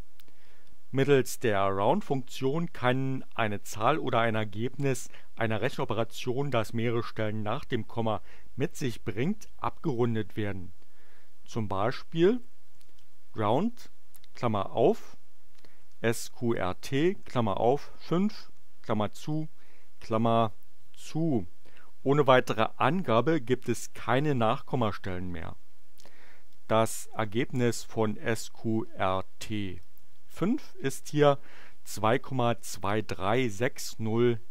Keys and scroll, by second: 12.0-13.8 typing, 15.5-19.3 typing, 21.0 Return, 26.4-28.1 typing, 29.4 5, 30.0 shift+9, 30.3 shift+Return.